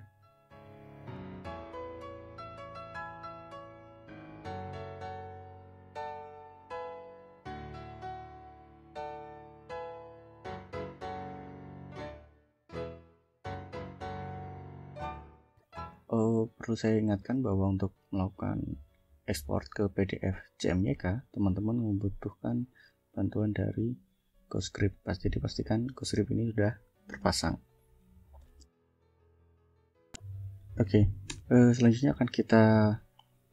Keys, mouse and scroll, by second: 9.9 click, 15.5 click, 15.9-17.5 scroll up 8, 17.7-18.0 scroll down 2, 20.6 click, 21.4-21.9 scroll down 4, 23.7-25.0 drag, 27.1 click, 27.6 click, 28.4 ctrl+l, 29.4 Up, 31.1 Return.